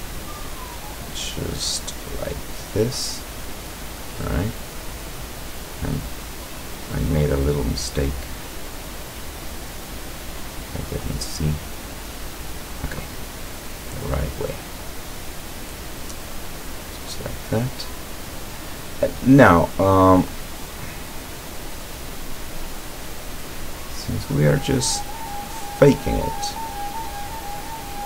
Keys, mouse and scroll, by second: 2.0 click, 3.3-5.4 middle drag, 6.1-7.5 drag, 7.9 right click, 8.4-10.6 drag, 11.1 right click, 11.8-13.1 drag, 15.5 click, 16.4-17.7 middle drag, 18.1 scroll down 1, 18.6-19.9 middle drag, 20.4 right click, 21.3-21.7 scroll up 1, 21.8 middle click, 21.9 click, 22.7 right click, 23.5-24.8 drag, 25.2 right click, 26.2 click.